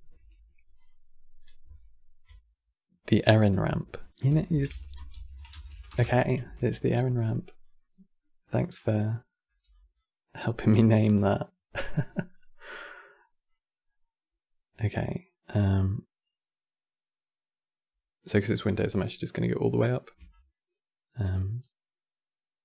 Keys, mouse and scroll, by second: 0.5-3.6 drag, 6.9-7.9 drag, 7.9-8.5 middle drag, 8.5 scroll down 4, 8.7 middle click, 9.5 click, 10.4 g, 11.7-12.5 middle drag, 12.5 click, 13.7 scroll up 3, 14.7-17.7 drag, 19.5-20.0 scroll up 4, 20.0-22.6 shift+drag.